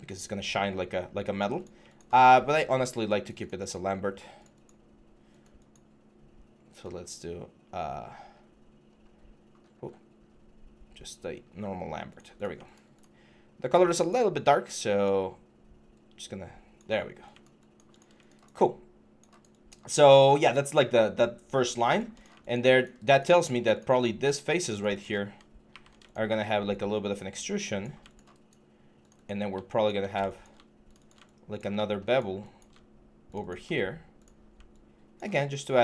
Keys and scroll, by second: 25.5 ctrl+e.